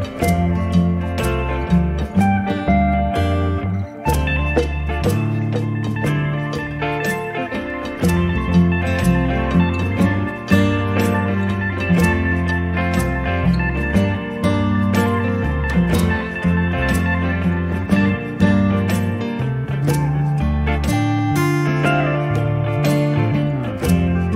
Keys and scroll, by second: 12.4 space, 19.9 space, 21.9 e, 22.1 space.